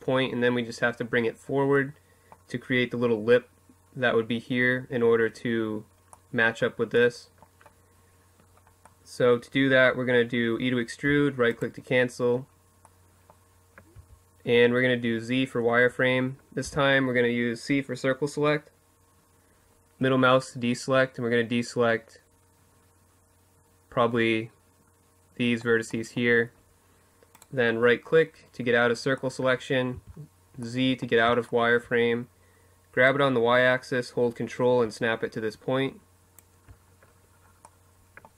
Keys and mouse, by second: 0.4-2.2 middle drag, 9.8 e, 12.7 z, 15.3 c, 26.1-30.3 middle drag, 28.7 z, 31.8 middle click, 32.4-35.1 drag, 35.9 middle click, 37.4 z.